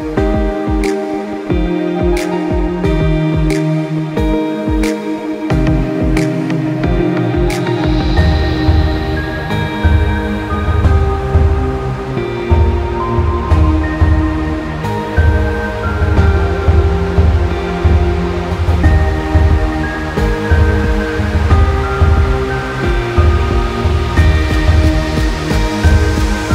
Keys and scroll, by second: 20.7 ctrl+z, 20.9 ctrl+-.